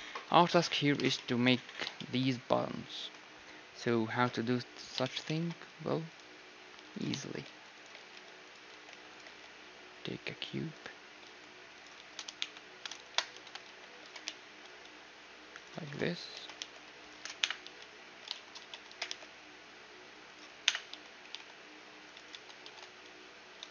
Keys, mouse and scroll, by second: 0.4 z, 2.6-3.9 middle drag, 4.8 scroll up 1, 5.0-7.0 middle drag, 5.8 shift+a, 7.4 s, 7.9 g, 8.7 s, 9.2 g, 11.2-14.0 typing, 16.1 s, 17.4-18.9 typing, 17.9-20.5 middle drag, 20.6 KP_1, 20.9 z, 21.2 g, 22.6 Tab, 23.6 a.